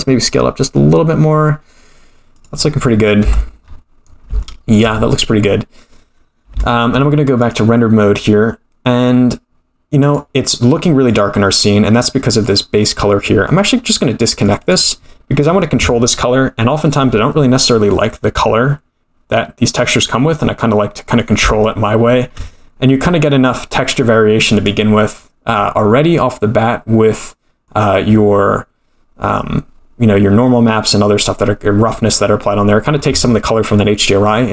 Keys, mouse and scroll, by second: 3.2 Tab, 3.5-4.3 scroll down 9, 4.4-4.8 shift+middle drag, 6.3 scroll up 1, 6.5 shift+middle drag, 7.5 click, 10.0-11.1 drag, 12.2 middle click, 14.4 drag, 17.9-20.1 middle drag, 20.1-20.4 scroll up 3, 20.4-21.2 middle drag, 21.6-22.2 shift+middle drag, 22.7 scroll down 1, 23.0 middle click, 24.5 click, 25.1-25.4 scroll down 1, 26.2-27.8 middle drag, 27.8-28.1 scroll down 3, 31.2-32.1 scroll up 2, 32.4-32.8 middle drag.